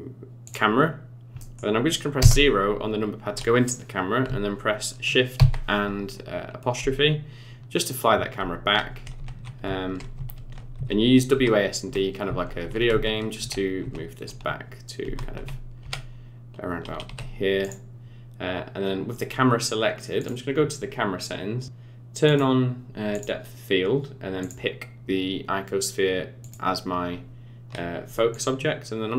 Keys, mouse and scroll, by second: 1.0 scroll down 3, 1.3 middle click, 2.1 KP_0, 5.3 shift+`, 20.1 click, 22.3 click, 23.2 click, 24.4 click, 28.3 shift+click.